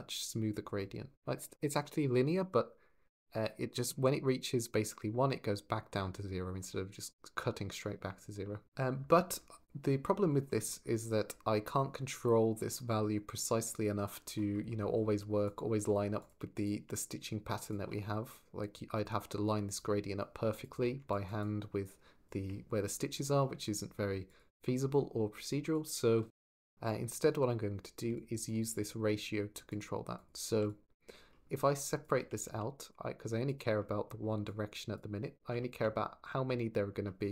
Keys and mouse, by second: 10.9-14.1 drag, 15.2 click, 15.6 g, 19.5 ctrl+shift+click, 20.3 ctrl+shift+click, 20.9 shift+click, 21.2-22.3 shift+drag, 24.1 ctrl+shift+click, 25.5 click, 27.9 alt+click, 29.5 click, 30.0 click, 30.3 x, 30.5 click, 31.5 click, 34.4 click, 35.4 shift+click.